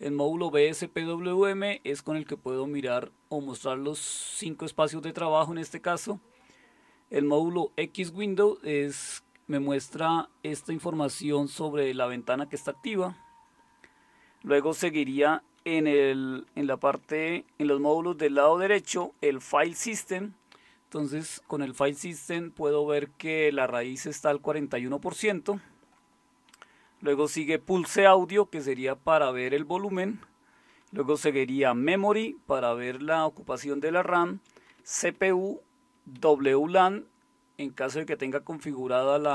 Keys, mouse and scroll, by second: 16.4 Down, 17.2 Left, 17.8-18.2 Left, 19.0 Right, 19.2 Right, 26.9-27.9 Right, 30.9-34.9 Right, 36.3 Right, 36.5 Right.